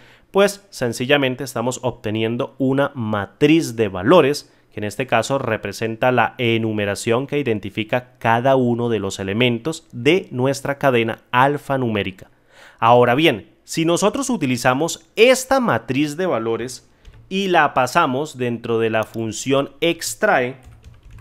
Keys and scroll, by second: 17.0 ctrl+z.